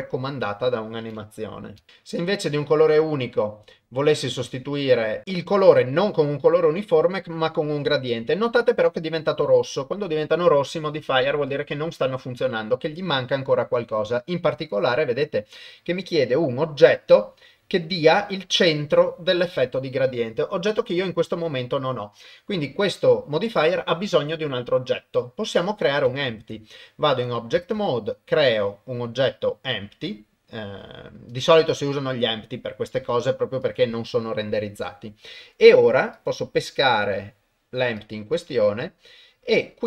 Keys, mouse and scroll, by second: 4.9 middle click, 5.9 click, 6.5 click, 26.3 ctrl+Tab, 27.8 shift+a, 33.7 click.